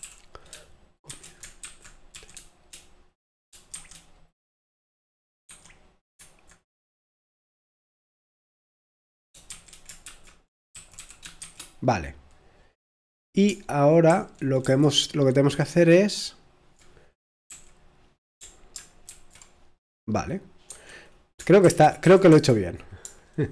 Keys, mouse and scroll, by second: 1.1 typing, 2.1 typing, 3.3-4.0 typing, 5.5 l, 11.0-11.4 typing, 14.1 super+2, 14.6 super+1, 19.1 i.